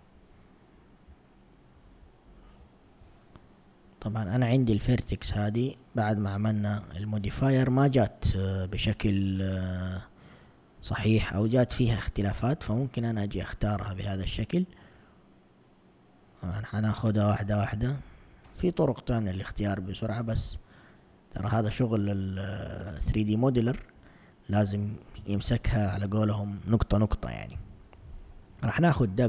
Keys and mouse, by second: 2.6 ctrl+Tab, 4.8 click, 5.8 shift+click, 6.4 click, 7.0 click, 7.6 click, 8.1 shift+click, 8.7 shift+click, 9.3 shift+click, 9.8 shift+click, 10.3 shift+click, 11.0 shift+click, 11.6 shift+click, 12.2 shift+click, 13.0 shift+click, 13.6 shift+click, 14.1 shift+click, 14.6 shift+click, 15.1 shift+click, 15.8 shift+click, 16.2 shift+click, 16.8 shift+click, 17.3 shift+click, 17.9 shift+click, 18.4 shift+click, 19.2 shift+click, 19.5 shift+click, 20.0 shift+click, 20.7 shift+click, 21.1 shift+click, 21.9 shift+click, 22.4 shift+click, 22.9 shift+click, 23.6 shift+click, 28.3 w.